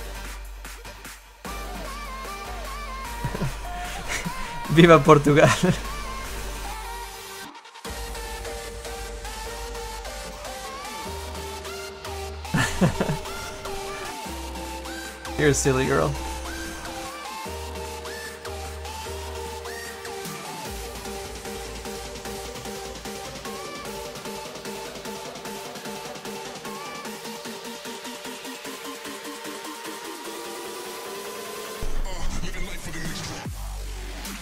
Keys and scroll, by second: 0.8 s, 18.5 s, 20.0 s, 23.3 s.